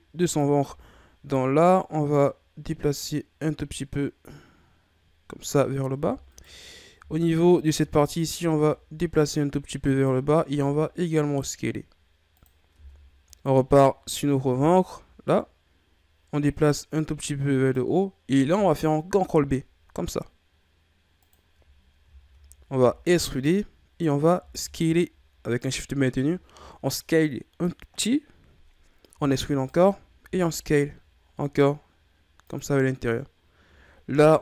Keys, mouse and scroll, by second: 0.2 alt+right click, 2.1-5.1 drag, 6.0 Tab, 6.3 right click, 7.0 Tab, 7.6 a, 7.8 a, 8.4-10.6 drag, 10.6 s, 12.7 Tab, 13.3 right click, 14.5 Tab, 16.5-19.1 drag, 19.1 ctrl+b, 21.7-22.2 ctrl+scroll up 1, 22.2-22.5 shift+scroll up 1, 22.8 e, 23.8-24.3 scroll up 1, 24.3 s, 29.1 e, 30.2 s, 34.1 ctrl+r.